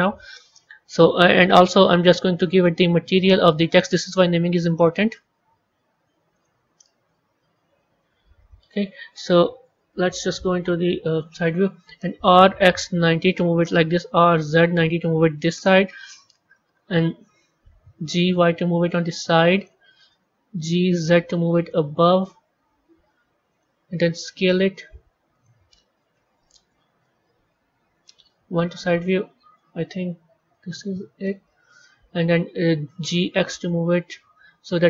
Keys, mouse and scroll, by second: 2.4 click, 3.6-6.6 drag, 7.3 z, 7.9 z, 9.5 KP_3, 10.1-11.9 scroll down 15, 11.9 r, 13.9 r, 17.7 g, 20.5 g, 24.1 s, 27.9 KP_1, 28.9-30.0 middle drag, 30.0 KP_3, 31.1-32.8 middle drag, 32.8 g.